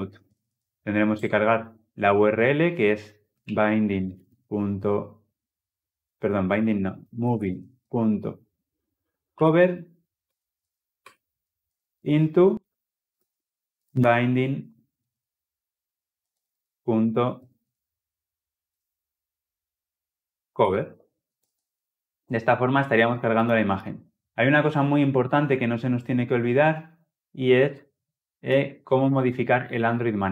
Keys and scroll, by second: 0.8 Return, 10.0 Return, 20.3 Return, 21.0 ctrl+alt+l, 25.2 ctrl+alt+o.